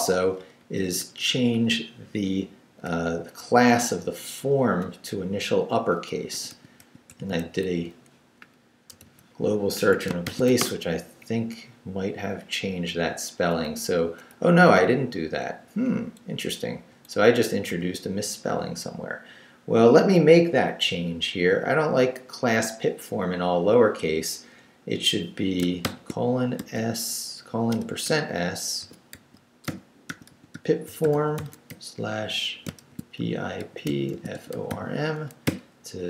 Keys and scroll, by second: 6.1-11.0 typing, 9.7 Escape, 11.2 Up, 13.7 Up, 14.3 Down, 15.7 Down, 16.2 Left, 25.8-35.4 typing.